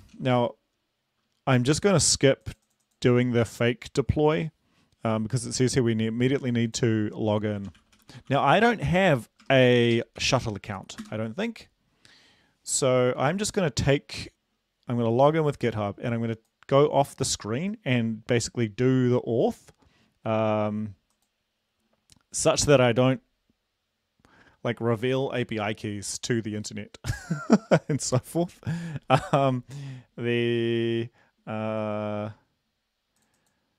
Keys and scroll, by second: 0.0-0.4 typing, 7.6-10.2 typing, 11.0 Return.